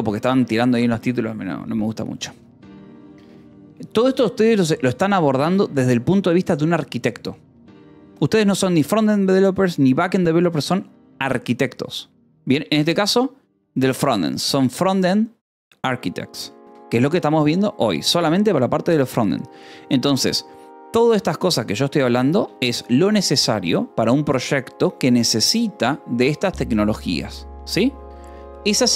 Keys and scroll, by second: 17.1 Escape, 20.0 k, 21.7 j, 22.8 shift+g.